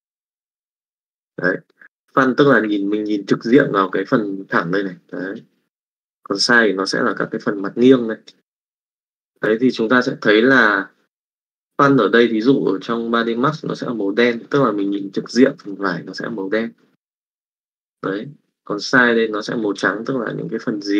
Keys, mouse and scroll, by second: 0.0-1.1 drag, 1.7 middle click, 2.0 shift+middle click, 3.5 middle click, 4.5 click, 5.0 click, 7.1-8.3 drag, 15.2-17.5 drag, 20.3 click.